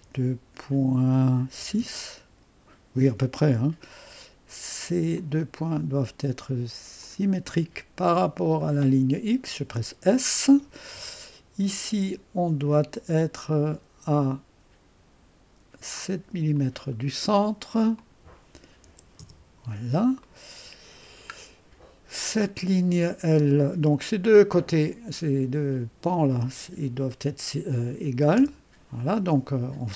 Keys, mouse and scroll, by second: 0.0 typing, 1.3-2.1 typing, 5.0 typing, 5.1 click, 7.0 click, 8.6 click, 9.0 click, 12.9 click, 14.1 click, 16.5 click, 17.9 click, 18.9 7, 19.1 Return, 20.2-22.1 middle drag, 24.5 click, 26.0 click, 28.3 e.